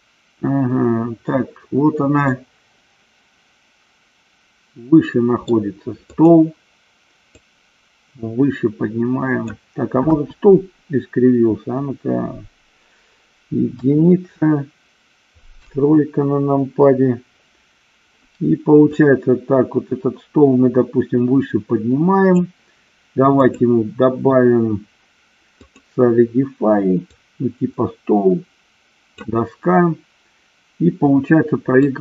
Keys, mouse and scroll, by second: 2.5-5.7 middle drag, 6.2 click, 7.7-9.7 drag, 10.4 KP_1, 14.0 KP_1, 15.7 KP_3, 19.4-22.7 drag, 23.7-26.1 drag, 27.4-29.6 drag.